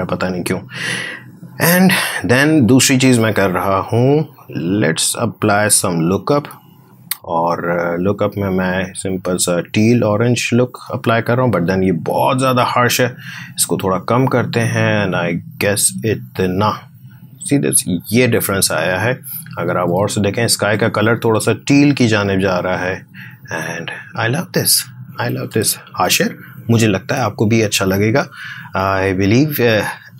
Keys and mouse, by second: 1.6 click, 5.7 click, 12.4-17.4 drag, 18.7 space, 18.8 ctrl+click, 24.4 space, 24.8 click, 25.7-28.9 ctrl+drag.